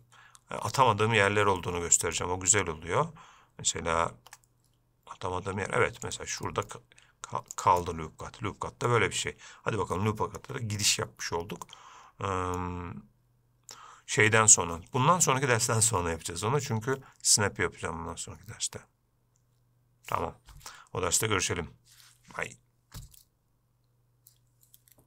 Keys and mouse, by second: 1.9 middle click, 4.4 ctrl+r, 8.1-9.2 middle drag, 10.2 shift+middle click, 11.9 middle click.